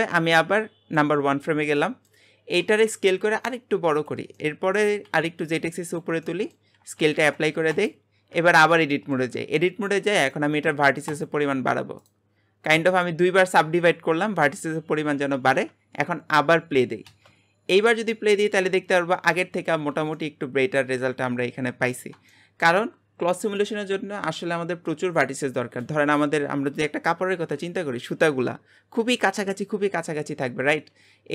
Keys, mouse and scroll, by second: 1.4 scroll down 2, 1.7 middle click, 2.5-2.9 scroll down 1, 2.9 s, 4.4 middle click, 4.8 g, 6.2 shift+middle click, 7.0 ctrl+a, 8.3 Tab, 8.7 middle click, 9.6-10.1 scroll up 1, 10.1-15.5 right drag, 15.5 Tab, 17.1 space, 19.7 space, 20.1-30.6 middle drag, 30.6-31.3 scroll up 4.